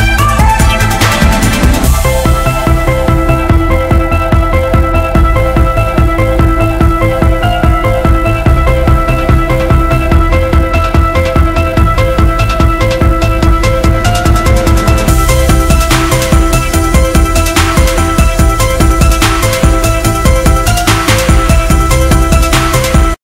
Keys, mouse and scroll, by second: 3.7 a, 4.2 a.